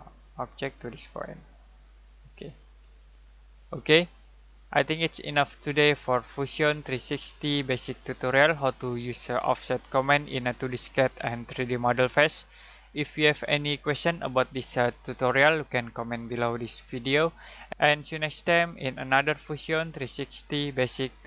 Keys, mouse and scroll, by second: 3.0 middle click.